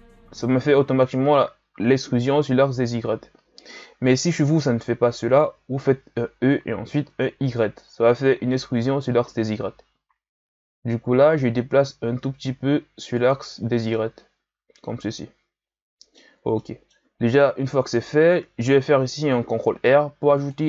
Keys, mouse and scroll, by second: 13.9-17.2 middle drag, 17.2-19.4 shift+scroll down 2, 19.4 ctrl+r.